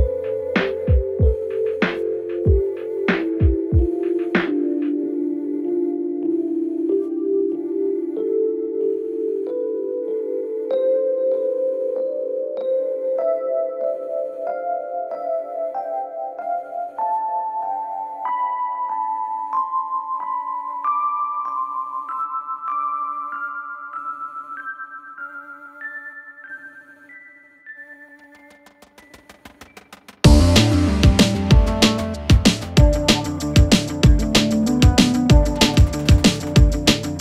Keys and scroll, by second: 0.3 space, 1.8 ctrl+r, 7.0 space, 7.9 ctrl+Page_Down, 8.7 ctrl+Page_Down, 10.4 shift+Page_Up, 13.2 Escape, 14.1 F10, 17.9 space, 18.2 Escape, 25.2 space.